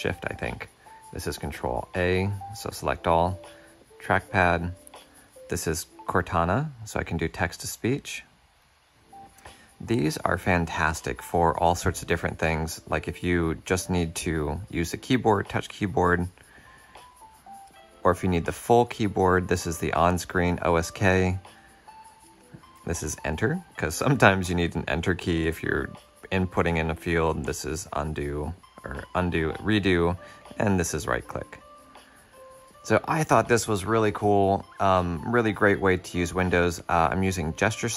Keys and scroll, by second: 1.3 ctrl+a, 5.2 super+h, 17.5 ctrl+super+o, 22.0 ctrl+super+o, 22.9 Return.